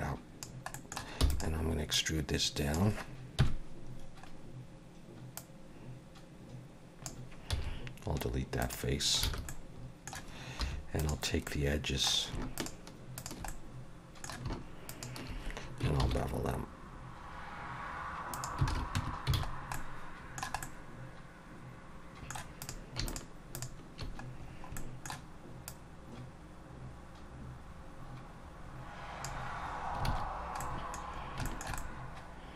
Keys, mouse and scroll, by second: 0.8 middle click, 1.2 e, 1.9 click, 3.4 KP_1, 4.2 scroll up 1, 5.4 click, 7.5 x, 9.4 alt+a, 9.5 middle click, 10.6 2, 11.0 click, 11.5 middle click, 12.6 shift+click, 13.2 click, 13.5 middle click, 14.9 shift+click, 16.0 ctrl+b, 18.7 alt+a, 19.0 Tab, 19.3 alt+a, 19.5-19.8 scroll down 2, 19.7 middle click, 20.6 middle click, 22.6 click, 23.1 shift+click, 23.5 click, 24.5 scroll down 3, 24.8 middle click, 25.7 click, 30.1 alt+a, 30.6 middle click, 31.1-31.4 scroll down 2, 31.5 shift+middle click, 31.8 middle click.